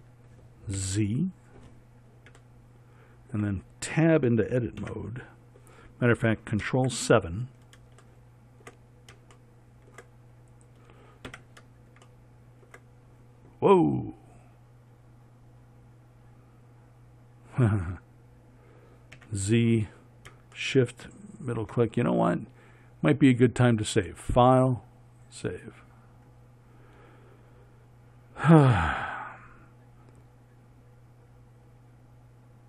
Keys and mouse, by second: 1.1 z, 5.2 Tab, 7.0 ctrl+KP_7, 19.5 z.